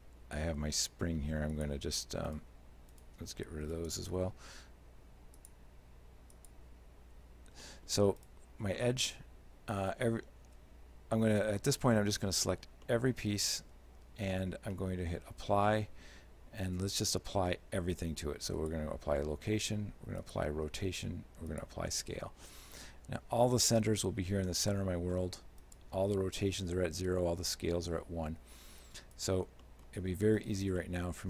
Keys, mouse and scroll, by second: 1.6 click, 2.3 right click, 3.0 shift+right click, 3.7 x, 5.4 click, 6.5 click, 7.2 z, 7.7 middle click, 8.2 right click, 8.8 shift+middle click, 11.4 a, 12.0 a, 12.2 middle click, 12.9 shift+middle click, 15.3 ctrl+a, 19.6 ctrl+a, 20.9 ctrl+a, 22.5 middle click, 25.7 right click, 29.5 right click, 29.5-30.4 scroll down 3, 29.7 middle click, 30.4 shift+right click, 30.8 shift+middle click.